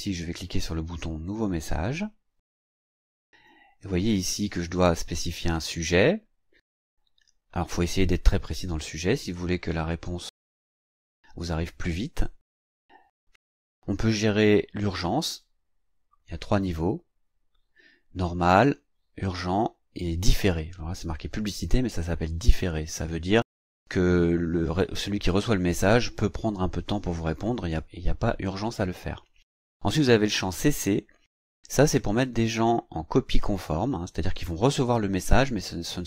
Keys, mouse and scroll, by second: 1.2 click, 3.5 click, 3.7 click, 31.7 click.